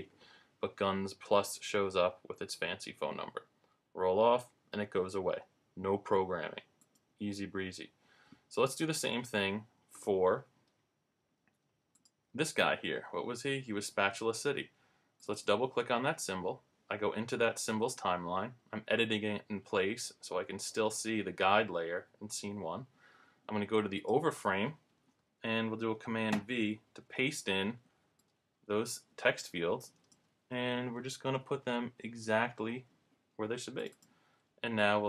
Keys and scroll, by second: 26.3 super+v, 30.9 Up, 31.4 Left.